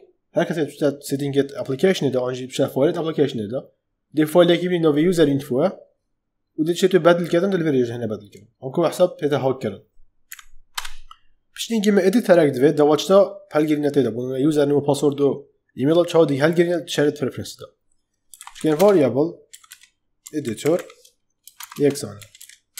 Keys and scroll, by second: 10.2 Right, 10.7 Return, 18.0-22.7 typing.